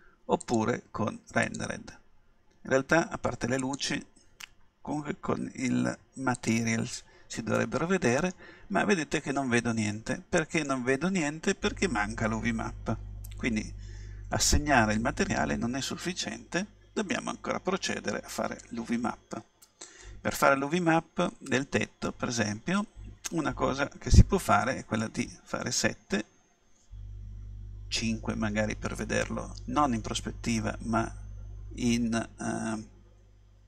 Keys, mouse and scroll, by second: 0.4-2.3 drag, 3.7-5.4 drag, 7.5-11.4 middle drag, 17.1-19.0 middle drag, 25.2 KP_7, 31.0 KP_5.